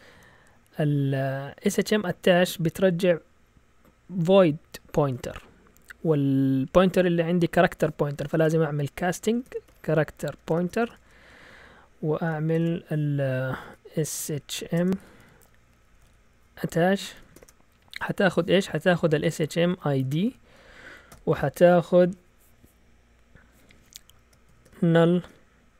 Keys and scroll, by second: 8.2-17.3 typing, 18.9-21.1 typing, 24.2-25.7 typing.